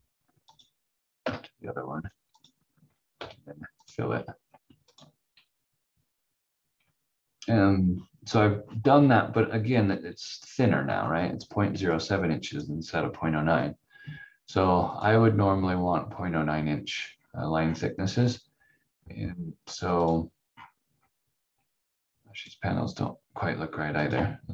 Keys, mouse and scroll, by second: 1.2 Delete, 2.3 click, 3.1 f, 3.8 click, 5.4 scroll down 1, 9.2-9.8 scroll up 1, 10.9-11.9 scroll down 1, 11.9 click, 17.1 scroll up 1, 19.5 scroll down 1, 20.5-22.4 scroll up 1, 22.4 click.